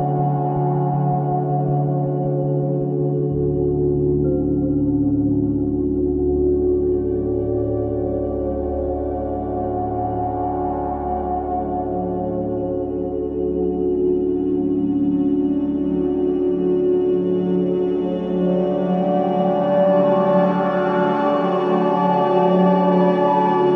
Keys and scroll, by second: 4.5 4, 6.7 2, 21.4 ].